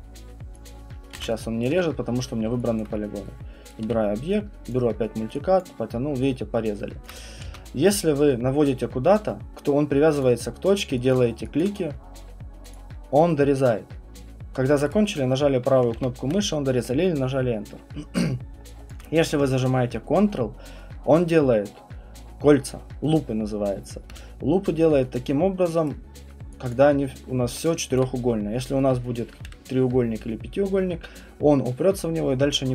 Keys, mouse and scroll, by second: 0.7 click, 1.1 z, 1.6 click, 1.6 right click, 1.8 q, 2.8 alt+click, 3.7 right click, 3.8 q, 4.7 click, 5.6 click, 7.1 click, 7.5 ctrl+z, 10.2 click, 11.1 click, 11.6 alt+click, 12.7 click, 15.0 right click, 15.9 ctrl+z, 18.9 alt+click, 25.9 right click, 26.7 alt+click, 28.0 alt+click.